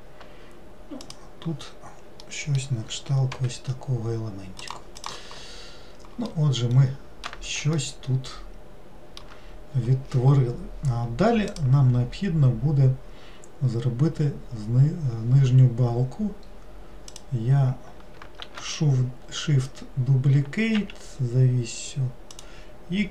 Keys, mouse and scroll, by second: 1.1 click, 2.3-3.5 middle drag, 3.5 g, 5.1 click, 5.7 scroll down 2, 6.4-10.9 middle drag, 17.2 click, 18.6 shift+d.